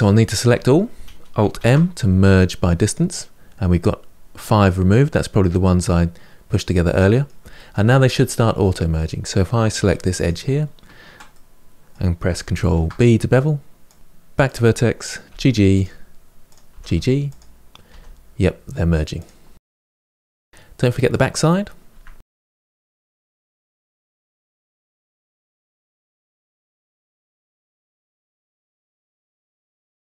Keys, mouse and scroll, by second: 0.3 a, 1.4 alt+m, 5.0-9.7 middle drag, 9.7 2, 10.0 click, 11.1-12.4 middle drag, 12.4 ctrl+b, 14.0 1, 14.3 click, 15.1 g, 16.3 click, 16.5 g, 17.7 g, 19.4 middle click, 19.7 g, 19.9 middle click, 20.0 Tab, 20.1 middle click, 20.2 scroll down 1, 20.3 middle click, 20.5 scroll up 1, 20.6 middle click, 20.7 Tab, 20.8 middle click, 21.1 click, 21.3 ctrl+b, 21.7 g, 21.8 click, 21.9 g, 22.0 Tab, 22.1 middle click, 22.2 Tab, 22.3 middle click, 22.4 click, 22.6 g, 22.7 Tab, 22.8 middle click, 23.0 ctrl+z, 23.1 ctrl+z, 23.2 click, 23.4 click, 23.5 Tab, 23.6 middle click, 23.8 scroll down 2, 23.9 middle click, 24.4 click, 24.6 ctrl+b, 24.9 scroll up 3, 25.0 click, 25.1 g, 25.3 click, 25.4 Tab, 25.5 middle click, 25.6 Tab, 25.7 middle click, 25.8 click, 26.1 g, 26.2 Tab, 26.3 middle click, 26.4 scroll down 2, 26.5-26.9 middle drag, 26.9 Tab, 27.1 click, 27.4 ctrl+b, 27.6 click, 27.7 g, 27.9 click, 28.0 Tab, 28.1-28.6 middle drag, 28.7-29.4 middle drag, 29.4 Tab, 29.6 click, 29.7 scroll up 2, 29.9 ctrl+b, 30.1 click.